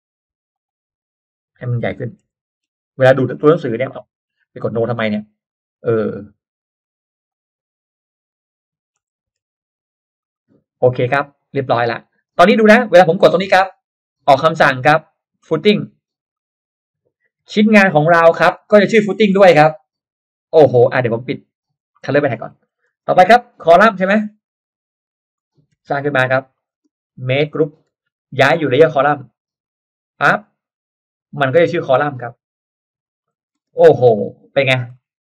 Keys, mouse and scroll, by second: 0.5 click, 1.3 click, 2.1 1, 2.6 6, 3.3 click, 3.3 6, 5.7 click, 7.3 click, 8.1 click, 9.1-10.2 typing, 10.1 click, 10.9 middle drag, 11.2 scroll up 1, 11.3-12.3 drag, 12.4 click, 16.3 click, 18.3 click, 19.1 click, 19.7 click, 20.0 click, 21.5 click, 22.0-22.6 scroll down 2, 22.2 middle click, 22.6 middle click, 22.9 middle click, 22.9 space, 23.6 r, 24.1 click, 25.0 click, 25.3 middle click, 25.9 click, 25.9 p, 26.0 p, 26.5 click, 26.9 click, 27.1 space, 27.2 click, 28.1 g, 29.7 click, 31.5 click, 32.5 click, 33.0 click, 33.5-33.8 scroll down 1, 33.8 space, 34.1-34.5 middle drag, 34.5-34.8 scroll down 1, 35.0 middle click, 35.1 scroll down 1.